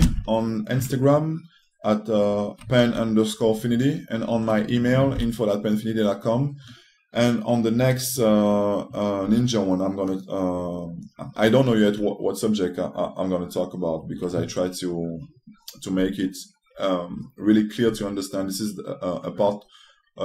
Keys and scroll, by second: 9.9 s.